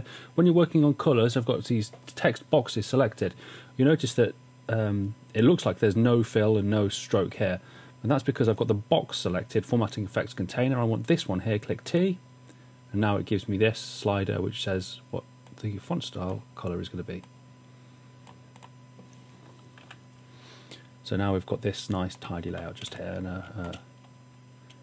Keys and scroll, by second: 19.8 w, 22.5-22.8 typing.